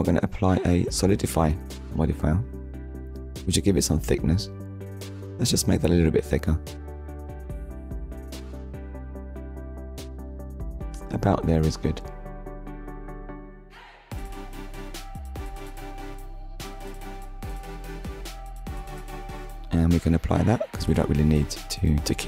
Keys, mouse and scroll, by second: 1.2 click, 2.1 middle click, 2.8-3.7 scroll up 3, 5.7 shift+click, 14.7 middle click, 15.9-16.3 scroll down 1, 19.0 click, 20.0 click, 21.1 middle click, 22.0 Tab.